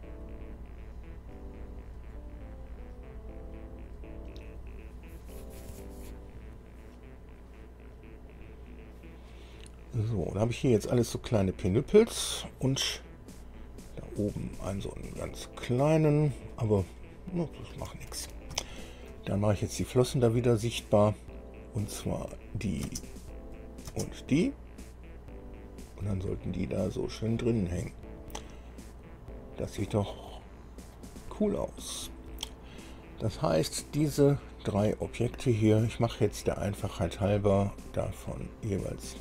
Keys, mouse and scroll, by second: 10.8 scroll down 1, 11.3 middle click, 13.4-13.7 scroll up 1, 13.9 scroll up 1, 14.7 scroll up 1, 15.4-16.7 middle drag, 17.2-17.5 scroll down 1, 17.8 scroll down 1, 18.2 shift+middle click, 18.9 shift+click, 22.4 click, 23.1 space, 23.7 click, 24.1 space, 25.5-25.9 scroll up 2, 26.1 scroll up 2, 26.2-27.7 drag, 28.0-28.5 scroll up 2, 29.4 scroll up 2, 29.9-31.3 drag, 31.6-32.4 scroll down 4, 35.9 click, 37.5 click, 38.5 click.